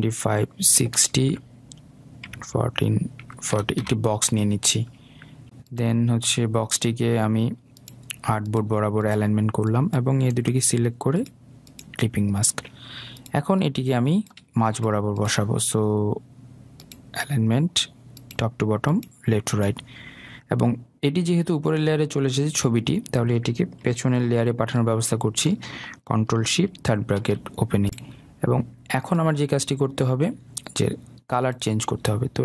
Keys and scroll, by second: 1.6 Tab, 4.3 Return, 27.4 ctrl+shift+[.